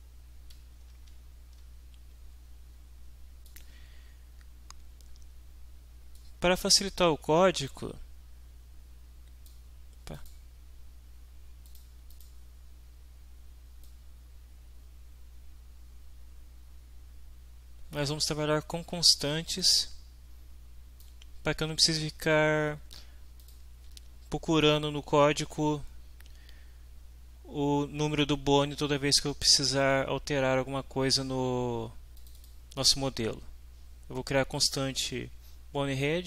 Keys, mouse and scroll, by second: 0.9 alt+Tab, 3.4 click, 6.1-9.7 drag, 10.1 click, 11.7 click, 12.1 click, 13.8-18.1 middle drag, 19.6-21.2 drag, 23.4 click, 32.2 click.